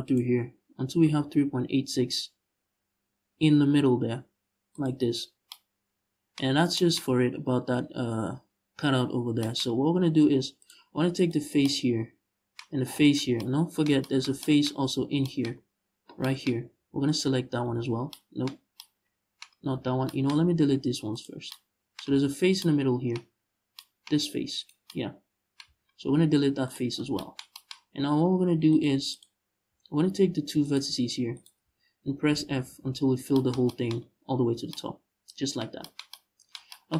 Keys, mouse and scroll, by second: 4.5 shift+click, 4.9 scroll down 2, 6.1-6.4 scroll up 1, 9.4-9.9 scroll up 1, 10.3 click, 10.8 right click, 12.3-12.7 scroll up 1, 12.7 shift+right click, 14.3 scroll up 1, 14.6 z, 15.1-15.8 scroll up 1, 16.7 shift+right click, 17.4 ctrl+z, 19.2 z, 19.5 scroll down 2, 20.1 x, 21.7 z, 24.2 right click, 25.3 z, 25.7 x, 26.6 scroll down 1, 28.3 click, 28.7 click, 29.2 scroll up 1, 29.4 z, 30.2 right click, 31.0 shift+right click, 31.3 z, 31.9 f, 32.7-33.0 scroll down 1, 33.6 Tab.